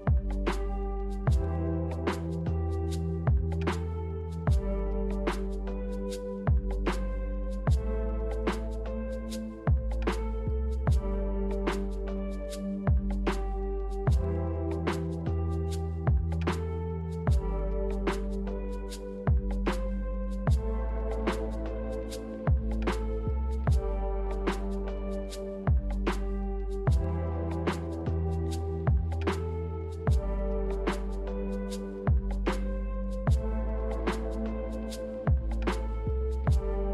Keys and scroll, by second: 2.6 b, 5.3 Delete, 6.1 m, 8.4 a, 13.2 ctrl+z, 17.0-18.2 typing, 20.1 b, 21.9 Delete, 28.8 a, 29.5 ctrl+h, 34.2 g, 35.6 z.